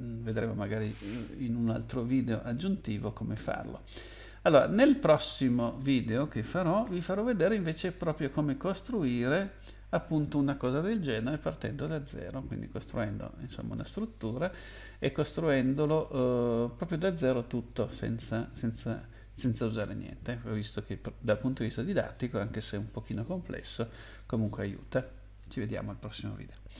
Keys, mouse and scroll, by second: 3.3 click, 5.2 click, 7.9 click.